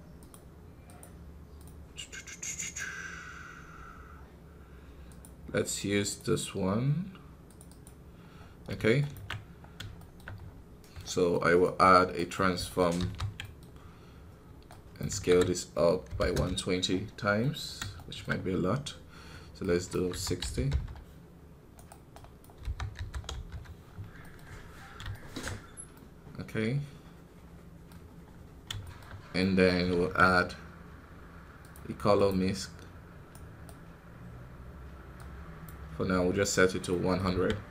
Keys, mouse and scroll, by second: 9.5 scroll up 3, 9.9 shift+middle click, 10.3 scroll down 4, 12.9 ctrl+t, 16.2 click, 16.8 scroll up 6, 17.3-19.6 middle drag, 19.6-23.7 drag, 23.7-24.1 scroll down 4, 24.1 middle click, 24.3 scroll up 4, 25.8-28.2 middle drag, 28.2 scroll down 3, 28.7-32.1 shift+middle drag, 32.1 shift+a, 35.2 click, 36.0 scroll up 1.